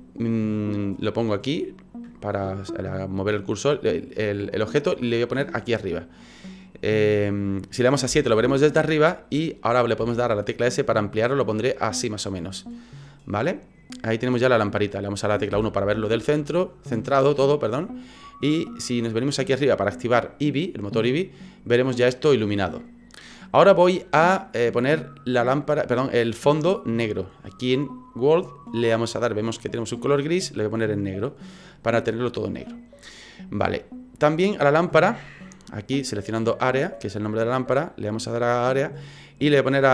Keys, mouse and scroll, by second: 1.2 click, 3.4 click, 6.7 middle click, 8.0 KP_7, 10.0 s, 12.4 middle click, 14.3 click, 15.5 KP_1, 20.5 click, 21.4 scroll up 3, 28.4 click, 29.9 click, 37.8 click, 39.4 click.